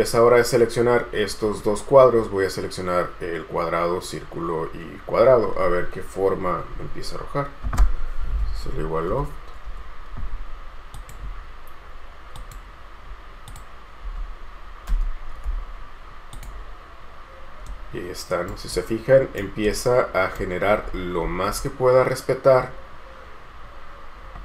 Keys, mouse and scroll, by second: 8.2-9.8 typing, 17.8 right click, 21.0-24.4 scroll up 1.